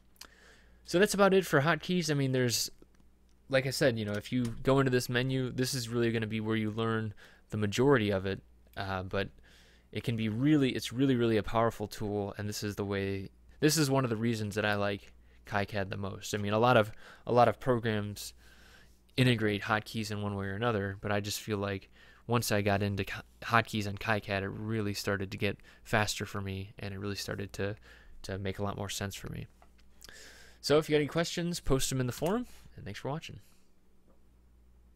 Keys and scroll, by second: 4.5 shift+/, 32.2 Escape.